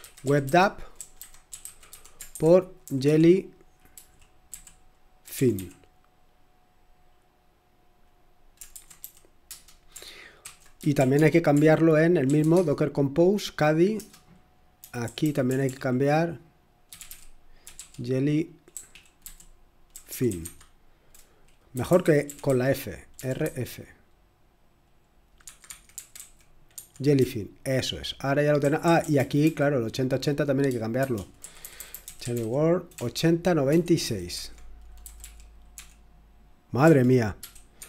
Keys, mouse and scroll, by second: 0.0-6.0 typing, 8.0-12.9 typing, 13.9-23.4 typing, 25.4 Escape, 25.6-26.7 typing, 28.3-29.1 typing, 30.7-35.7 typing, 36.8-37.7 typing.